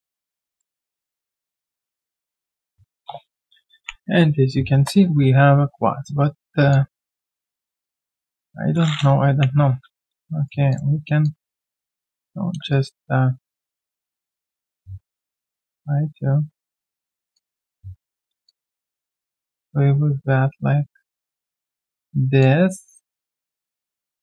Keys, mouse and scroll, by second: 5.5 Delete, 5.7 ctrl+z, 6.7 alt+click, 9.3 Delete, 10.0 right click, 10.9 Tab, 12.7 shift+right click, 17.3 alt+click, 18.4 alt+click, 22.4 alt+click.